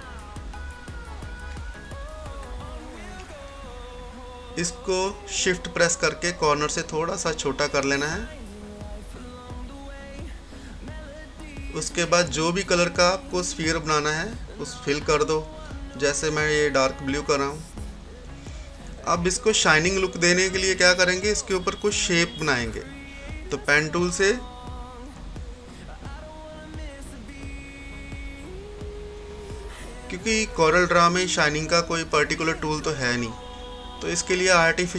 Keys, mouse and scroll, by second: 0.5 typing, 0.7-2.6 drag, 2.6 scroll up 1, 4.5-13.0 drag, 13.1 click, 15.5 scroll up 1, 16.1-17.8 scroll down 1, 17.8-19.1 typing, 19.0 click, 19.1-22.4 drag, 22.5 click, 22.5 typing, 24.0 scroll up 1, 25.5 click, 32.2 scroll up 1, 32.2 typing, 33.1 click, 33.2-34.9 drag.